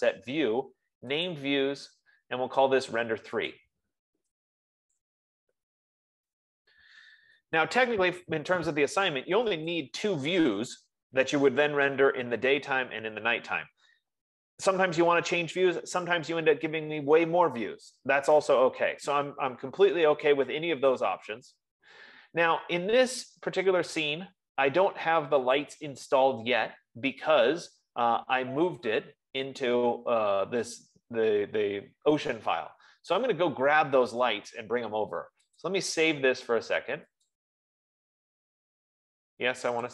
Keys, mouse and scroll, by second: 1.9 click, 3.9 click, 5.3-7.7 typing, 10.3 click, 14.2 click, 26.1-31.1 drag, 33.8 F15, 36.1 click, 37.7 click.